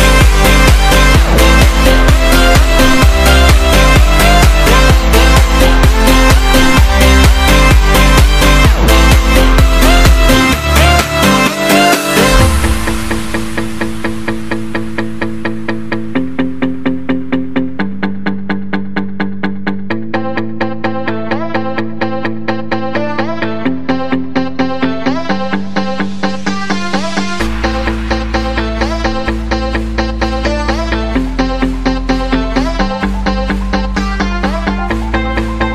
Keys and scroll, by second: 20.2 super+=, 20.4 super+=, 20.9 super+=.